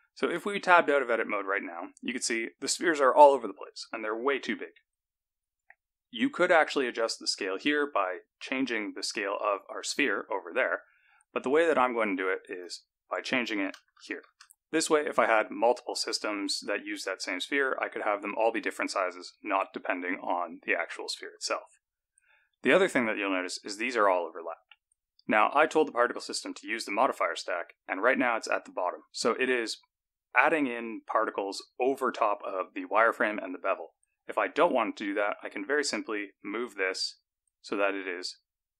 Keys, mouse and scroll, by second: 1.3 Tab, 9.5-11.0 scroll down 5, 11.0-12.8 scroll up 4, 12.8 click, 20.8-24.5 scroll up 6, 27.0 click, 34.6 click, 36.5 click, 38.1-38.7 scroll down 5.